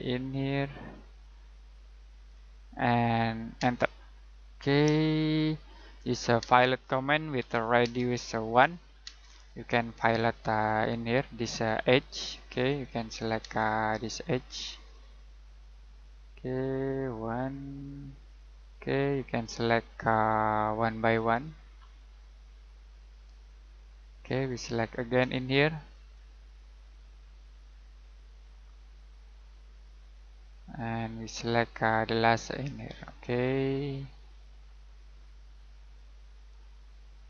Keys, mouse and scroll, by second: 0.9 click, 1.5 middle click, 2.2-2.6 scroll down 1, 2.6 middle click, 3.6 space, 4.2-4.6 scroll down 1, 4.6 middle click, 5.0 middle click, 6.4-9.0 typing, 9.5-10.3 scroll up 1, 10.3 middle click, 10.7-11.6 scroll up 1, 11.6 click, 13.4 space, 13.9 click, 17.1 middle click, 18.2 click, 23.8 middle click, 25.3 click, 30.5 middle click, 32.6 click.